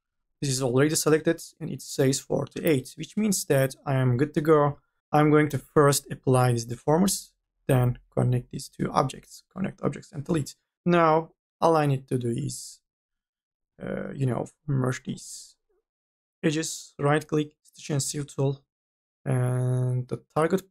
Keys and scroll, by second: 4.3 4, 5.0 ctrl+z, 9.7 2.